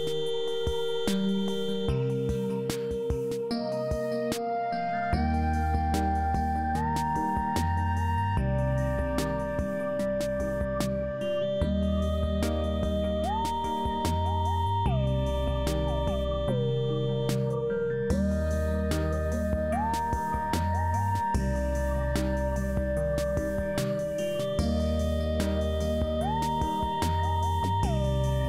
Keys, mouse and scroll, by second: 0.0 shift+s, 2.0 shift+s, 3.5 shift+s, 7.2 shift+s, 8.9 shift+s, 11.9 shift+s, 13.1 shift+s, 15.1 shift+s, 18.4 shift+s, 20.3 shift+s, 21.4 shift+s, 22.6 shift+s, 24.0 shift+s, 24.9 shift+s, 26.0 shift+s.